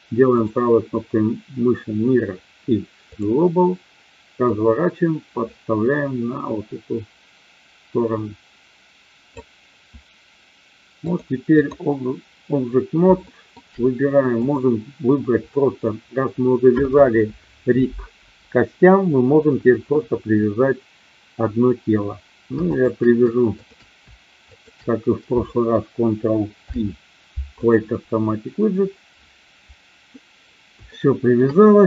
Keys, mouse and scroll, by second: 0.3-3.2 right drag, 4.3-9.2 drag, 11.0 click, 13.2-13.6 shift+middle drag, 14.5 click, 23.5 shift+click, 26.5 ctrl+p, 30.8 shift+middle click.